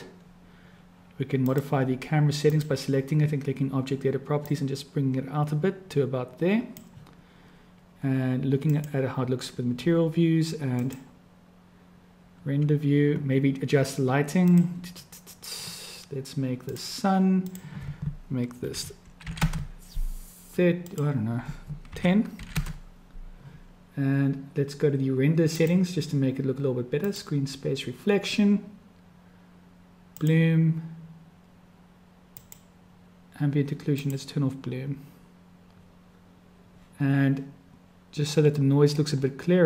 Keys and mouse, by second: 1.5 click, 2.5 click, 4.4-6.8 drag, 9.0 click, 10.9-16.1 drag, 16.5 click, 17.6-23.7 drag, 25.5 click, 27.3 click, 30.1 click, 33.1 click, 34.0 click.